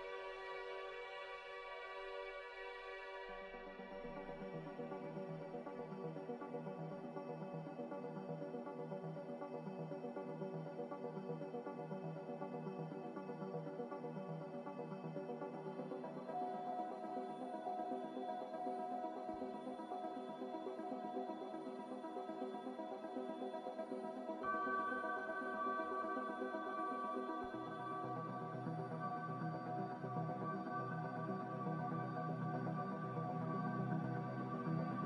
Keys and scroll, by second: 0.6 5, 0.8 Tab, 1.1 5, 1.2 Tab, 1.4 5, 1.5 Tab, 1.7 5, 4.7 2, 5.7 Tab, 7.0 4, 7.2 Tab, 7.8 2, 7.9 Tab, 8.4 4, 8.8 Return, 16.1 Delete, 20.0 Escape, 20.7 Escape, 20.7 g, 29.0 a.